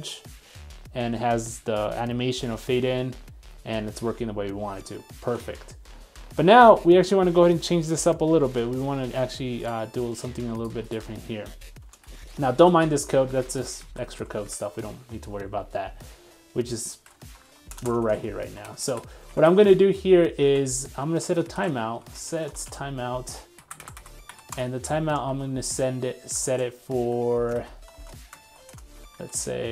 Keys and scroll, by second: 5.3 super+Tab, 19.3 super+Tab.